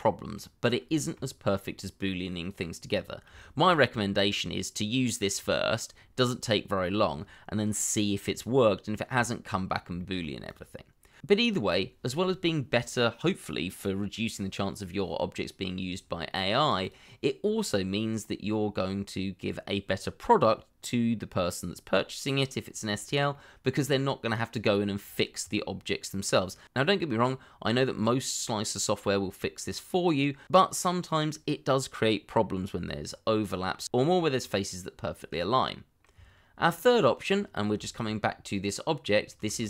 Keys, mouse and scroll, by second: 0.6 scroll down 1, 0.9 shift+middle click, 1.4 middle click, 3.3 shift+middle click, 9.2 shift+middle click, 12.6 shift+click, 17.9-18.4 scroll down 1, 23.3 shift+middle click, 35.3 middle click, 37.4 scroll up 1, 37.8 shift+middle click, 38.1-38.5 scroll up 1, 38.5 middle click, 39.5 shift+z.